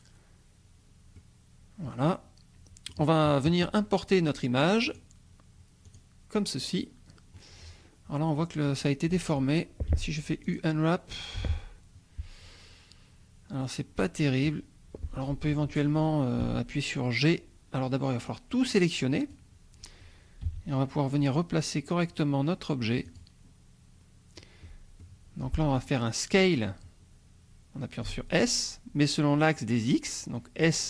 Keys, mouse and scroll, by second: 1.4-3.1 drag, 4.8 click, 6.1 click, 6.8-7.5 scroll down 4, 7.8 scroll up 1, 9.9 u, 10.5 click, 11.4 u, 16.4 g, 18.3-20.4 drag, 20.4 g, 23.1 click, 23.6-24.2 scroll up 1, 24.2 scroll down 1, 25.0 click, 28.1 s.